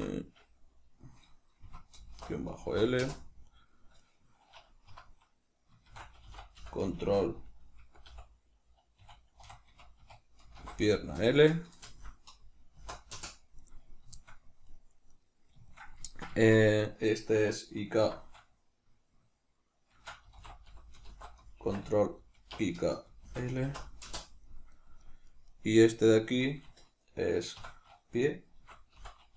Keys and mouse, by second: 3.9 right click, 4.8 F2, 14.1 shift+middle click, 14.5 right click, 15.0 right click, 15.6-24.6 shift+middle drag, 17.9 F2, 24.6 right click, 24.9 right click, 25.2 right click, 25.4 right click, 25.7 right click, 27.4 F2.